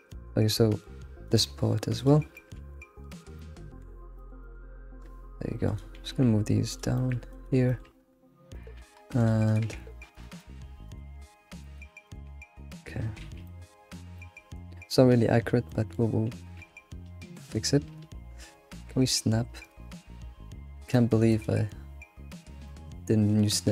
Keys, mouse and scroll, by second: 0.1-1.2 middle drag, 1.2 click, 2.0 shift+click, 2.3 middle click, 3.1 shift+click, 3.4 middle click, 4.4 alt+middle click, 5.6 click, 6.2 g, 7.0 shift+middle click, 7.3 click, 7.7 shift+middle click, 8.0 scroll up 3, 8.5 click, 8.8 g, 9.5 click, 9.6 g, 10.4 shift+middle click, 10.9 click, 11.1 g, 12.0 click, 12.3 g, 12.9 scroll down 2, 13.2 alt+x, 13.4-16.6 middle drag, 13.7 g, 16.6 g, 21.3-23.7 drag.